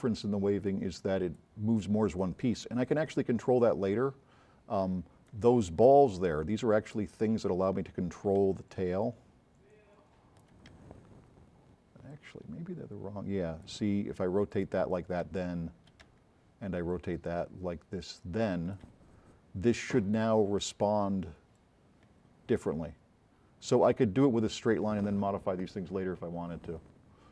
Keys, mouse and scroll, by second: 2.9-3.3 drag, 6.7 c, 8.5 v, 9.1 click, 10.9 c, 12.1-13.7 drag, 14.5 click, 15.3 v, 16.1 c, 20.5 c, 21.6-22.1 drag.